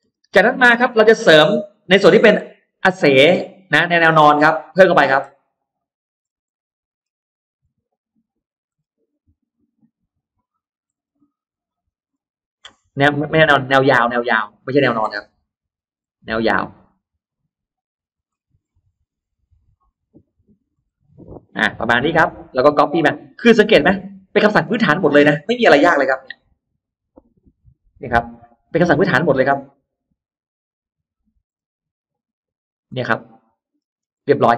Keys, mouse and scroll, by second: 0.3 middle click, 1.0-1.8 scroll up 2, 1.6-2.6 middle drag, 2.7-3.0 scroll down 1, 3.1-3.8 scroll up 2, 4.6 click, 5.7 shift+click, 6.0-7.0 shift+scroll down 2, 6.3 middle click, 7.1-7.4 scroll up 2, 7.6 shift+click, 8.2 shift+click, 8.6 scroll down 2, 9.1-9.7 scroll up 2, 10.0 shift+click, 10.5 shift+click, 10.8-11.1 scroll down 1, 11.6-12.6 scroll up 4, 13.8 shift+click, 14.5 shift+click, 14.8-15.2 scroll down 2, 15.6-16.3 scroll up 4, 16.9 shift+click, 17.7 shift+click, 18.0-18.8 shift+scroll down 5, 18.8-19.2 scroll up 1, 19.6 shift+click, 20.3 shift+click, 20.6-21.0 shift+scroll down 1, 21.4-21.7 scroll down 1, 21.9 middle click, 22.7-23.4 scroll up 1, 23.3-24.7 middle drag, 24.8 scroll down 2, 25.1-25.4 scroll up 2, 26.2 m, 27.3 click, 27.7-28.0 scroll down 1, 29.8 shift+scroll up 1, 31.3-31.6 shift+scroll up 1, 32.3 shift+click, 32.9 middle click, 33.5-34.5 scroll down 2, 34.0 middle click, 34.3 space.